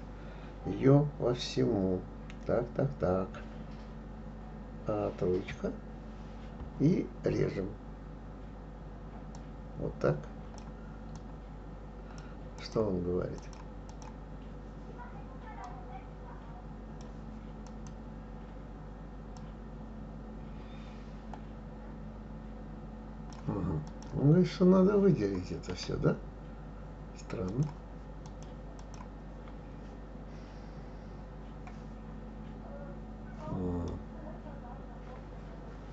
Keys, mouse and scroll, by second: 5.5 KP_3, 9.3 click, 11.1 click, 12.6 click, 13.4 click, 13.9 click, 15.7-17.9 drag, 19.4 click, 23.9 click, 27.5-28.4 drag, 28.8 click, 33.9-35.9 middle drag.